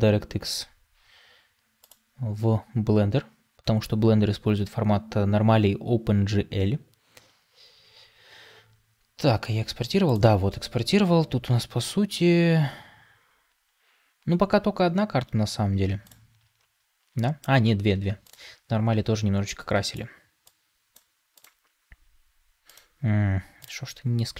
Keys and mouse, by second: 21.1-22.0 drag.